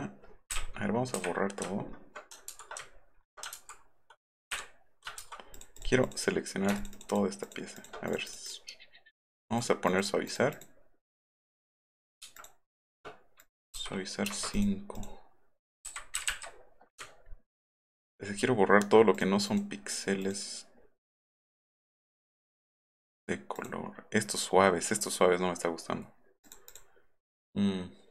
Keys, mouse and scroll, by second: 0.5 Delete, 1.1 Delete, 1.7-2.0 alt+scroll up 4, 2.9-3.3 alt+scroll up 4, 3.5 ctrl+z, 5.2 ctrl+z, 5.5 click, 5.8 click, 6.0 click, 8.1 click, 8.3 click, 8.5 click, 9.3 click, 9.9 click, 10.3 click, 10.5 click, 11.0 click, 12.3 shift+click, 14.3 Return, 14.5 click, 15.0 click, 15.8 Delete, 16.3 Delete, 16.9 alt+middle click, 17.0 alt+scroll down 1, 17.3 alt+middle click, 17.3-17.7 alt+scroll up 2, 17.5 alt+middle click, 19.1 alt+click, 19.5 click, 20.2 click, 21.7 click, 22.9 click, 23.6 click, 26.5 click, 26.7 click.